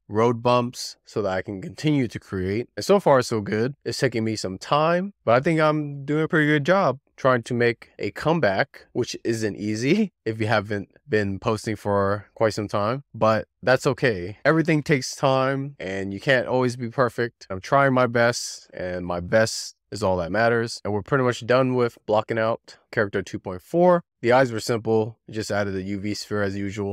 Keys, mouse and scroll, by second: 0.0 Left, 0.2-0.6 scroll down 4, 0.6 middle click, 0.9 scroll up 2, 1.0 middle click, 2.6 click, 2.9 scroll down 3, 3.1 scroll up 1, 3.2 middle click, 3.8 scroll down 1, 4.1 scroll up 1, 4.2-4.8 middle drag, 5.2 scroll down 4, 5.4 middle click, 5.4 scroll up 4, 5.6-5.9 scroll down 1, 5.9 scroll up 1, 6.1 scroll down 1, 6.3 middle click, 6.6 scroll up 1, 6.7 middle click, 7.4 shift+click, 7.9 middle click, 8.2 click, 8.5 middle click, 9.2-9.7 scroll up 8, 9.9 z, 10.0-10.6 scroll down 8, 10.2 middle click, 10.6 shift+middle click, 11.1-11.6 scroll up 9, 11.6 1, 11.6 click, 11.8 click, 12.1 click, 12.3 click, 12.5 click, 12.9 click, 13.3 scroll down 3, 13.6 click, 13.8-14.1 scroll up 3, 14.7 scroll up 1, 15.2 click, 15.4 click, 15.6 click, 15.9 scroll down 2, 16.1 shift+middle click, 16.3 click, 16.7 z, 17.0 click, 17.3 click, 18.4 click, 19.8 click, 20.3 z, 20.6 click, 21.1 click, 21.6 scroll down 4, 21.9-22.5 shift+middle drag, 22.5 Tab, 22.8-23.1 scroll down 2, 25.2 click, 25.3-26.5 typing, 25.5 click, 25.9 click, 25.9 shift+middle drag, 26.6 scroll down 4, 26.8 middle click.